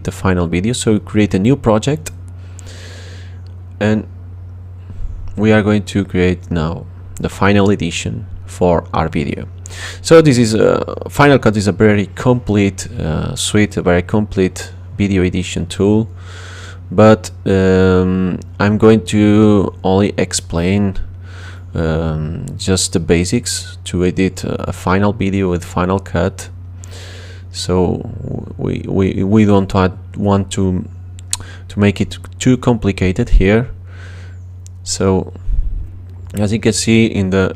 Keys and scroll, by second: 3.8-5.6 typing, 25.6 space, 31.0 space, 32.1 space.